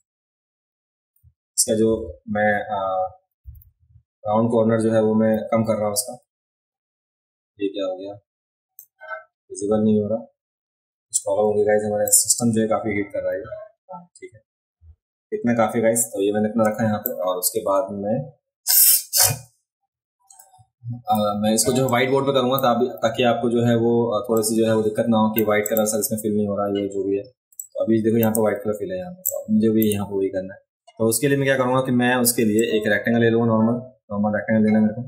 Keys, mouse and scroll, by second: 2.0-8.8 right drag, 12.1-17.0 drag, 21.6 v, 21.9 click, 24.3-25.4 drag, 25.7 click, 26.2-27.1 alt+scroll up 3, 27.5 space, 27.6 click, 29.2 space, 29.3 click, 32.6-35.0 drag, 33.7-35.0 right drag.